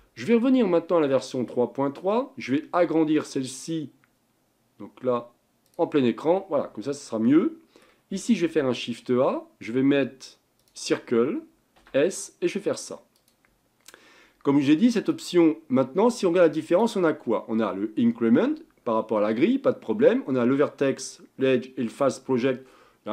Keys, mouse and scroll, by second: 3.2 click, 6.9-8.4 middle drag, 8.4 shift+a, 11.9 s, 15.1 click, 16.7-19.9 drag.